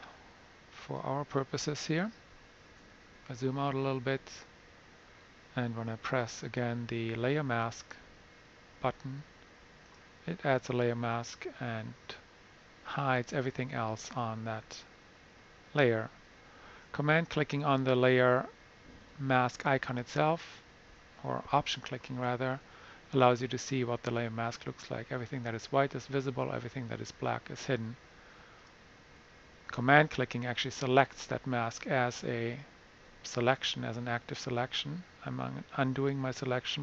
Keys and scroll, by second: 3.0 super+-, 3.4 super+-, 3.7 super+-, 4.2 super+-.